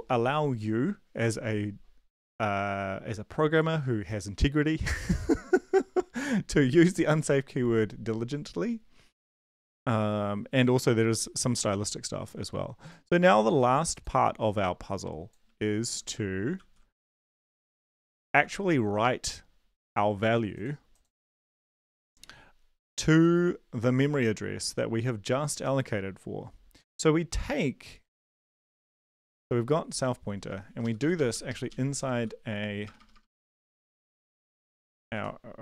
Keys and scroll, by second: 16.5 ctrl+c, 18.4 ctrl+v, 30.8 shift+Up, 31.0 shift+Up, 31.1 shift+Up, 31.3 shift+Up, 31.5 shift+Left, 31.7 shift+Up, 32.1 ctrl+x, 32.8 BackSpace, 33.0 BackSpace, 33.1 BackSpace, 33.6 Up, 33.9 Up, 34.4 End, 34.7 Return, 35.1 ctrl+v.